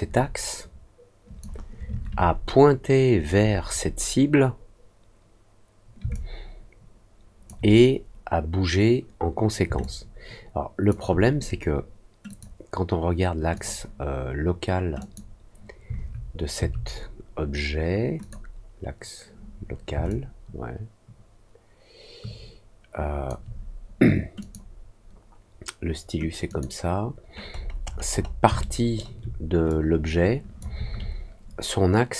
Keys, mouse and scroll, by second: 6.1-7.4 alt+drag, 9.7-10.8 alt+drag, 12.2 click, 13.5 click, 14.9 click, 18.1 click, 20.0-23.2 alt+drag, 24.3 click, 26.4 click, 27.5-28.3 scroll down 3, 28.5 alt+middle click, 29.6 click.